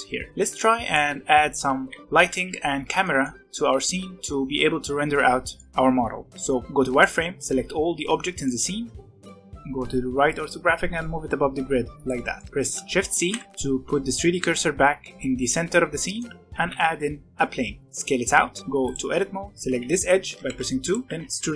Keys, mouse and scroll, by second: 0.2 alt+a, 0.3 middle click, 0.4 click, 1.2 z, 1.8 z, 2.0 scroll down 2, 2.2 z, 2.6-3.0 scroll up 1, 3.0-6.3 middle drag, 6.3 b, 7.8 z, 8.4-9.0 middle drag, 9.0 scroll up 2, 9.3 g, 12.1 scroll down 1, 12.3-13.2 middle drag, 13.2 shift+c, 13.5-14.3 scroll down 3, 15.8 scroll down 2, 16.0 middle click, 16.5 shift+a, 17.8 s, 18.6 2, 18.8 click, 19.6 alt+a, 19.8 click, 20.2 2, 20.4 2, 20.8 click, 21.0 e.